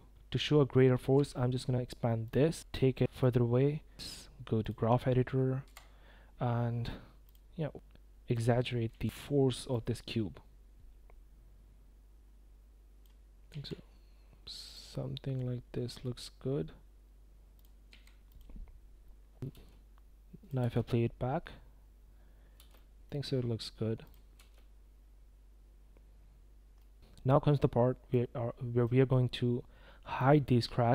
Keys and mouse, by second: 0.2 space, 0.4 click, 1.2 s, 2.0 g, 2.7 i, 4.1 click, 4.4 click, 4.8 click, 5.3 n, 5.9 click, 6.3 click, 6.8-7.1 drag, 7.2 shift+click, 7.3 s, 7.9 click, 8.1 s, 8.6 click, 9.6 s, 10.8-15.9 typing, 12.2 drag, 12.9 drag, 16.0-17.0 drag, 17.7 click, 17.9 s, 18.5 click, 19.1 click, 19.3 s, 19.5 space, 20.4 click, 20.5 space, 22.5 space, 22.7-23.0 drag, 24.1 drag, 24.3 space, 26.7 drag, 27.0 space, 28.2 click, 30.2 click.